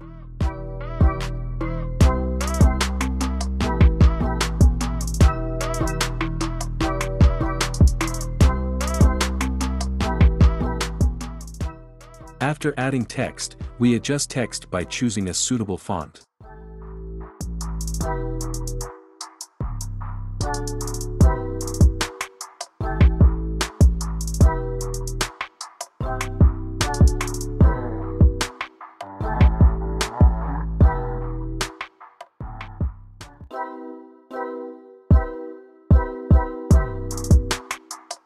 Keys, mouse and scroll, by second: 2.0 click, 3.2 click, 4.3 ctrl+z, 5.1 click, 9.0 click, 10.8 super+v, 13.6 click, 13.7 ctrl+v, 16.5 click, 20.9 click, 25.8 click, 26.9 click, 30.9 click, 32.7 click, 36.6 click.